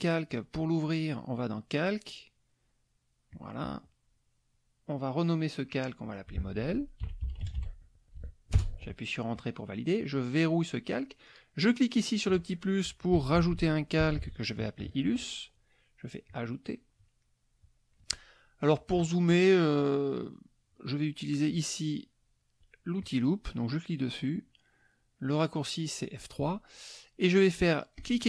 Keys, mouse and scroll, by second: 0.5 click, 3.3 click, 5.9 click, 6.8-8.2 typing, 8.6 Return, 10.5 click, 12.0 click, 13.1-14.7 typing, 16.3 click, 17.2 middle click, 23.0 click, 27.9-28.2 drag.